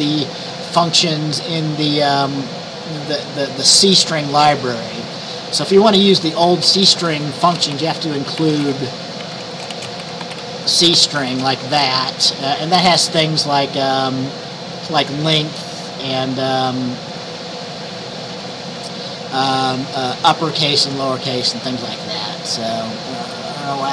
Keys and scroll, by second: 7.4-11.9 typing, 12.0 ctrl+s.